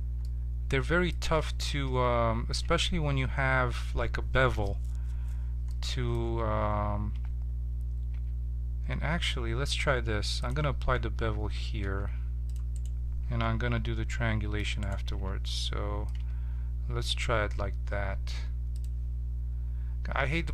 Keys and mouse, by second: 1.9 ctrl+z, 5.7-7.2 middle drag, 7.2 Tab, 8.2 Tab, 9.1 Tab, 11.0 Tab, 11.8 ctrl+Tab, 12.7-14.1 drag, 13.6 ctrl+t, 14.1-15.2 middle drag, 15.1 ctrl+t, 16.2 Tab, 18.7-20.5 drag.